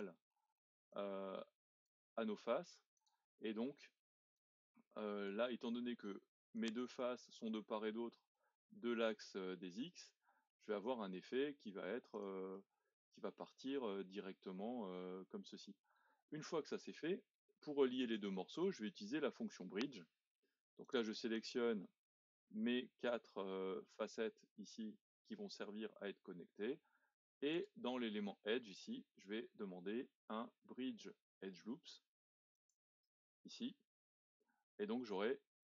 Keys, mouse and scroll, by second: 0.9 click, 2.1 e, 4.4 click, 5.5 e, 7.0-10.0 middle drag, 10.5 middle click, 11.4 e, 12.5-16.5 middle drag, 16.5-17.0 scroll up 2, 17.0-20.8 middle drag, 20.8 shift+click, 21.3 shift+click, 21.8-26.9 middle drag, 27.5-30.7 drag, 34.2-35.6 middle drag.